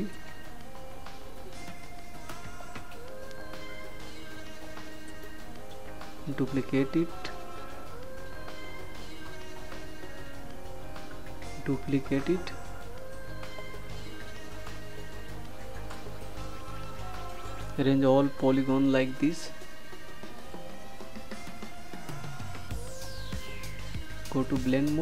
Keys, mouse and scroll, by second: 14.2 ctrl+d.